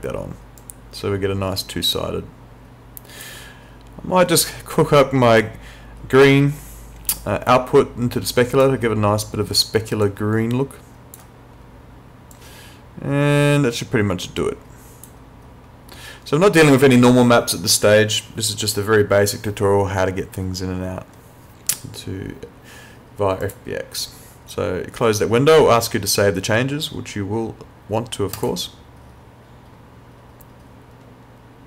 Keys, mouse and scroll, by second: 5.4 click, 10.0 click, 23.4 click, 28.4 click.